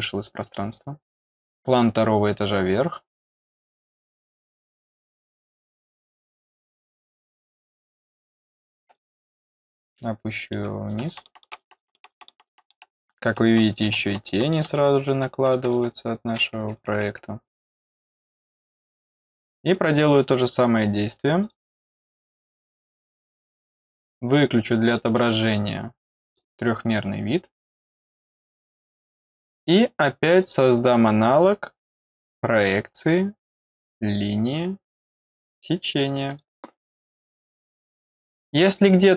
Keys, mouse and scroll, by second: 1.5 click, 6.0 click, 17.9 click, 18.9 middle click, 20.1 click, 21.4 click, 21.5 click, 22.3 click, 22.5 click, 23.3 click, 24.3 click, 24.8 click, 26.1 click, 26.2 click, 28.7 click, 30.4 click, 30.9 middle click, 31.2 middle click, 33.6 click, 36.2 click.